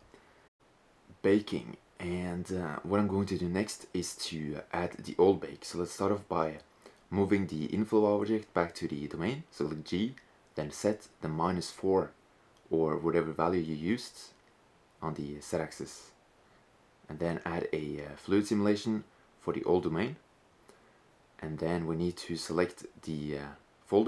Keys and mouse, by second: 0.4-2.1 drag, 5.1 right click, 7.9 g, 13.8-15.9 right drag, 16.7-19.9 drag, 24.0 click.